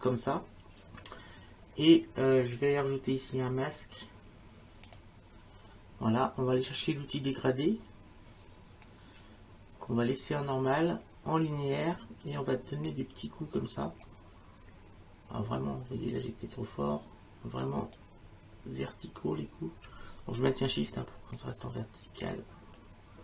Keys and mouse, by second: 2.7 click, 4.8 click, 7.6 click, 12.4 click, 13.6 click, 18.0 click, 20.7 shift+click, 22.2 shift+click.